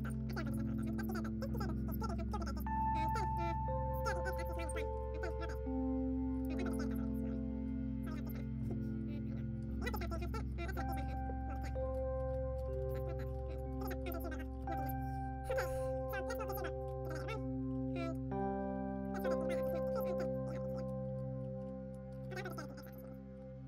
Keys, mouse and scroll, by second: 1.1-2.3 drag, 1.5 middle click, 2.3 shift+d, 2.5-4.0 drag, 4.0 s, 5.2 r, 6.3-8.6 typing, 9.6 middle click, 10.3-11.4 drag, 10.5 a, 10.6 right click, 11.5-17.1 middle drag, 11.7 a, 12.1 ctrl+n, 12.2 Tab, 12.5 a, 12.7 ctrl+s, 12.8 click, 13.3 Tab, 13.5 a, 15.5 Tab, 16.0-17.1 drag, 16.1 ctrl+s, 16.1 right click, 17.1 m, 17.5-18.9 drag, 17.7 middle click, 18.3 s, 18.6-21.1 middle drag, 18.9 s, 19.2 r, 20.2-22.5 drag, 21.1 s, 21.4-23.1 middle drag, 22.1 Tab, 22.3 a, 22.5 s, 23.3 Tab, 23.6 click.